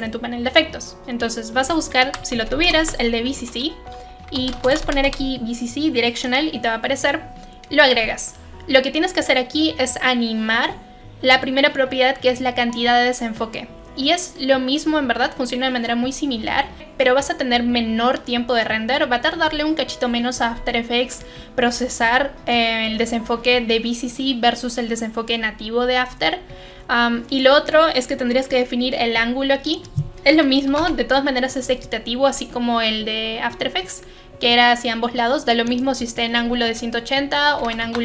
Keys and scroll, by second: 1.8-3.0 typing, 4.1-5.5 typing, 6.9-7.6 typing, 30.7 typing, 30.7 Return, 37.3-38.0 typing.